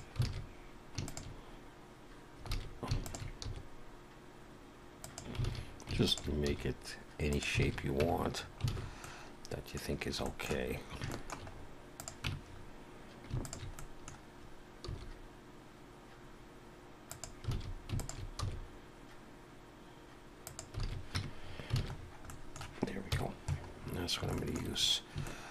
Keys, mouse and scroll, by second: 0.2 alt+a, 1.0 shift+click, 2.5 alt+a, 3.0 alt+shift+click, 3.4 s, 5.4 alt+a, 6.1 alt+shift+click, 6.5 s, 7.6 alt+a, 8.0 Tab, 8.3 scroll down 4, 8.7 alt+a, 9.0 middle click, 9.8-10.3 scroll down 4, 10.2 middle click, 10.7-11.9 scroll up 4, 11.1 shift+middle click, 12.0 click, 12.3 Tab, 12.5-13.3 scroll up 1, 13.3 scroll up 2, 13.4 alt+shift+click, 13.8 middle click, 14.9 s, 17.5 alt+a, 18.0 alt+shift+click, 18.4 s, 20.8 alt+a, 21.2 Tab, 21.4-22.1 scroll down 6, 21.8 alt+a, 22.3 middle click, 23.1 KP_1, 23.7-24.3 scroll down 5, 24.3 shift+middle click, 24.8 scroll up 2, 25.3 shift+middle click.